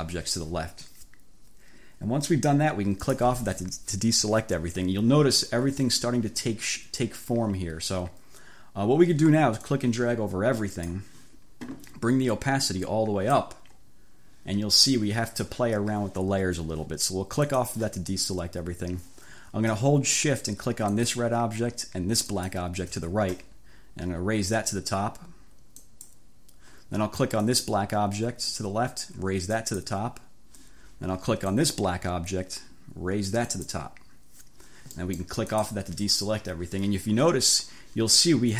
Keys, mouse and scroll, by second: 3.0 click, 9.7-11.2 drag, 12.7 click, 17.6 click, 21.0 shift+click, 22.4 shift+click, 25.9 click, 27.5 click, 29.6 click, 31.6 click, 33.5 click, 35.1-35.5 scroll up 2, 35.6 click.